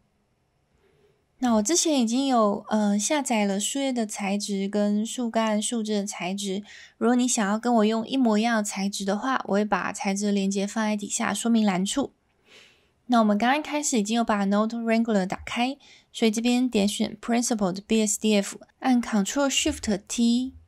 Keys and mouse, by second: 9.5 middle click, 10.6 middle click, 16.7 click.